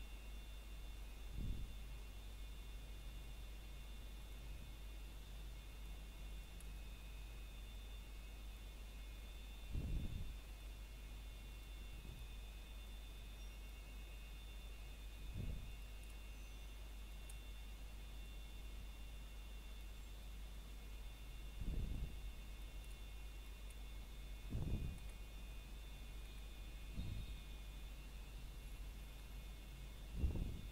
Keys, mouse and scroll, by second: 5.1 x, 9.9 click, 10.2 middle click, 11.4-11.9 scroll up 1, 12.3 middle click, 12.8-13.3 scroll up 1, 13.3 middle click, 14.7 click, 15.0-15.4 scroll down 1, 15.4 middle click, 16.8 shift+click, 17.2 middle click, 18.0 click, 19.1 middle click, 19.5-20.7 scroll up 1, 20.9 ctrl+Tab, 22.0 click, 24.6-25.0 scroll down 1, 25.0 middle click, 25.5 scroll up 1, 26.7 click.